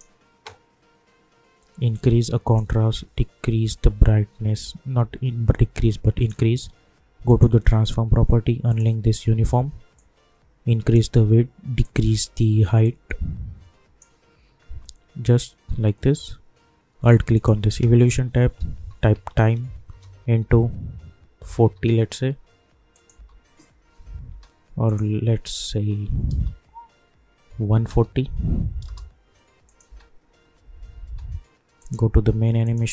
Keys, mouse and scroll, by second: 17.0 alt+Num_Lock, 17.0 click, 18.3-19.8 typing, 21.2-23.1 typing, 22.9 click, 24.8 click, 29.6 click, 29.9 space, 31.8 click.